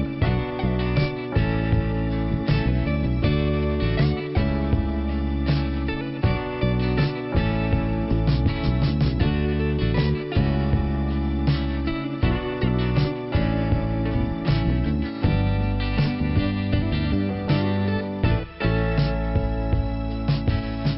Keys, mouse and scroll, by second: 0.7 click, 1.8 click, 2.3-2.7 scroll down 2, 2.7 ,, 3.4 click, 4.5 click, 4.7 click, 4.8 double click, 15.8 scroll up 2, 17.0 click, 18.1 scroll down 1, 18.8 middle click.